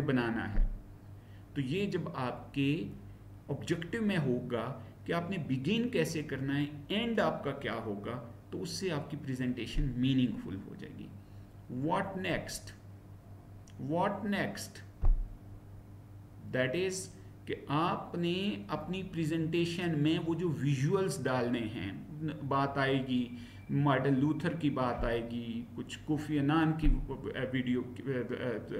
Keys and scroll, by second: 12.3 Right, 15.5 Down.